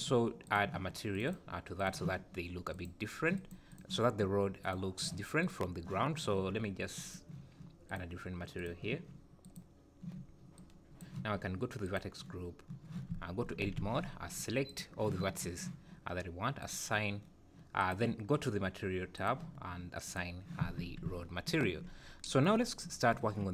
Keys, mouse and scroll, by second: 0.4 click, 1.1 click, 1.2 click, 3.4 click, 3.7 click, 5.0 click, 5.5 click, 7.0 click, 7.9 click, 8.5 click, 9.4 click, 11.8 click, 13.1 Tab, 13.7 alt+a, 14.6 click, 16.6 click, 17.8 click, 19.1 click, 20.0 click, 20.6 Tab, 21.9 scroll down 2.